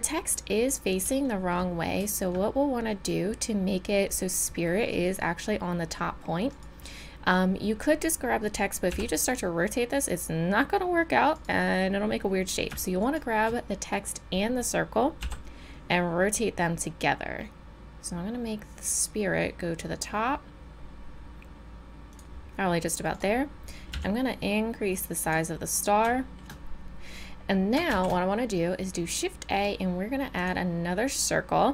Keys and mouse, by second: 6.5-8.4 drag, 8.4-8.9 middle drag, 8.9 r, 13.0-15.2 drag, 15.2 r, 23.1-25.3 drag, 23.9 s, 25.9 middle drag, 26.2-27.5 drag, 27.9 shift+a, 31.1 middle click, 31.3-31.7 drag.